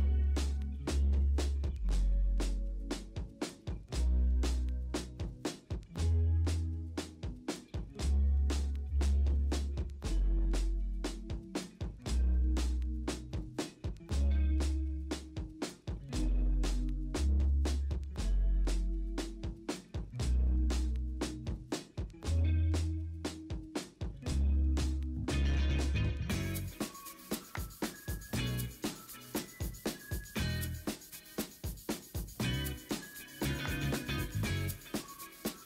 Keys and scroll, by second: 1.0 v, 6.4 b, 7.4 x, 7.8 x, 11.2 ctrl+alt+g, 13.0-14.7 typing, 16.0 ctrl+t, 16.8 Escape, 17.1 v, 18.6 ctrl+a, 19.5 ctrl+t, 20.6 ctrl+d, 21.4 ctrl+z, 22.5 ctrl+d, 22.7 ctrl+z, 23.1 ctrl+l, 24.1 ctrl+d, 24.5 typing, 26.0-26.7 typing, 28.1 ctrl+l, 30.2 v, 30.5 alt+Tab, 31.2 ctrl+t, 31.8 v, 32.1 ctrl+u, 33.6 ctrl+u, 34.5 ctrl+l.